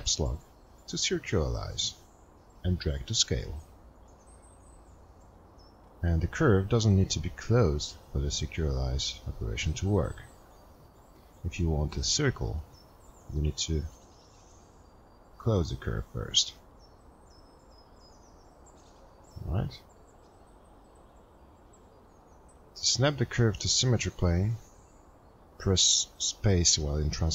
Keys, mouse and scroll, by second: 2.9 Caps_Lock, 2.9 click, 3.1 click.